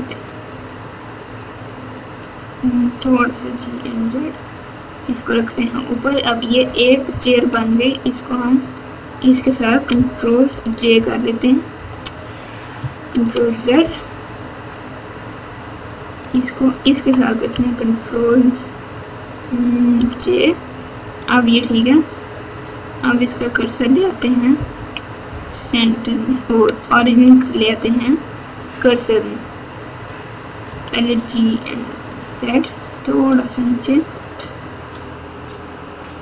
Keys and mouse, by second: 0.1 click, 1.9 click, 3.0 g, 5.5 click, 8.6 shift+click, 10.5 ctrl+j, 11.7 KP_8, 13.1 ctrl+z, 16.4 shift+middle click, 20.0 ctrl+j, 23.2 click, 24.7 KP_1, 26.8-27.6 drag, 30.6 g.